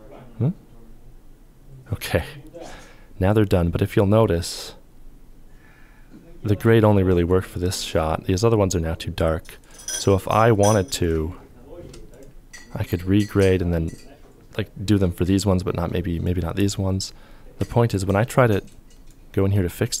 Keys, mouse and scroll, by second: 11.7 shift+click, 17.1 ctrl+click, 19.6 f.